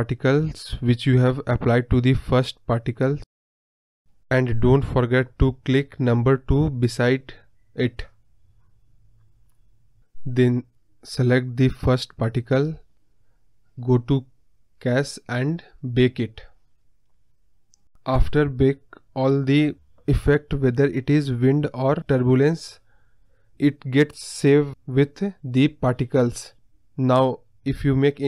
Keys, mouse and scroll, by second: 0.0-2.9 drag, 5.2 click, 9.5-18.3 drag, 19.1-19.6 scroll down 1, 19.6-20.0 scroll down 9, 20.0-21.2 scroll up 1, 21.2-21.5 scroll down 1, 21.5-22.3 scroll up 2, 22.3-22.9 drag, 22.9-23.8 scroll down 2, 23.8-25.8 drag, 25.8 space, 28.0 click.